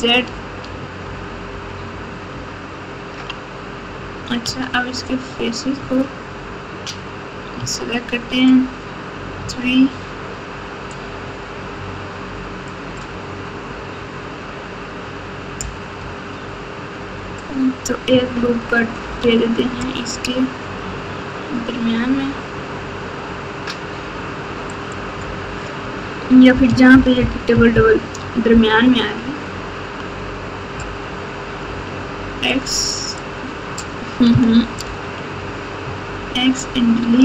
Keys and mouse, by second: 0.2 ctrl+z, 0.6 ctrl+z, 1.0 ctrl+z, 1.5 ctrl+z, 1.8 ctrl+z, 2.3 ctrl+z, 3.9 Tab, 4.4 Tab, 5.7 3, 7.5 Tab, 9.4 3, 10.9-12.7 drag, 19.0 ctrl+r, 26.9 ctrl+KP_4, 27.2 ctrl+KP_4, 27.5 ctrl+KP_4, 27.7 ctrl+KP_4, 31.6 x, 34.8 ctrl+z.